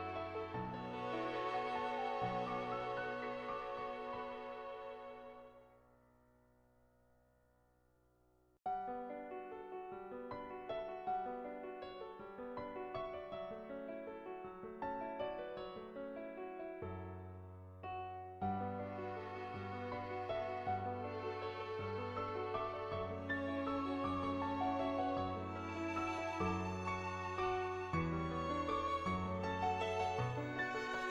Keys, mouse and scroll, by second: 1.6 [, 3.3-6.0 typing, 3.7 click, 4.2 click, 5.2 click, 6.2 click, 7.1 click, 7.1 [, 8.2 click, 8.7 click, 9.3 click, 16.7-25.3 drag, 30.2 click.